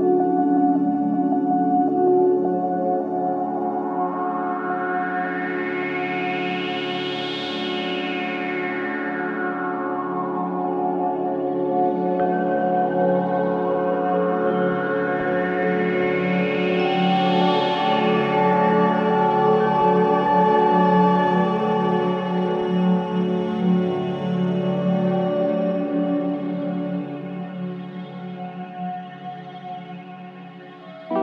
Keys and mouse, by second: 0.0-0.7 typing, 2.2 click, 3.3 g, 4.1 Escape, 4.9 ctrl+s, 6.3 KP_Divide, 6.3 typing, 7.4-9.9 alt+drag, 10.7-12.9 typing, 12.9 Return, 14.6 typing, 15.1 click, 16.0-16.3 typing, 17.4 click, 18.1-18.5 typing, 20.7 click, 23.6 ctrl+alt+click, 24.3-24.8 ctrl+alt+drag, 25.1 click, 25.4 click, 26.2-26.8 typing, 28.7-29.6 drag, 29.9-31.2 ctrl+alt+drag.